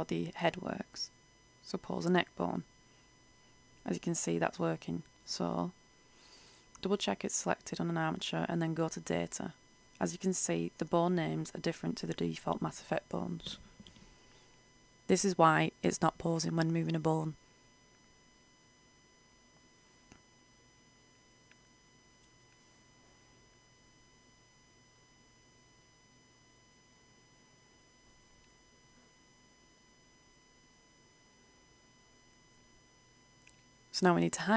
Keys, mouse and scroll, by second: 0.8 r, 3.4 click, 3.8 ctrl+z, 4.1 right click, 5.1 click, 9.4 right click, 15.6-18.3 drag, 26.6 a, 27.0 a, 32.1 h, 33.3 click.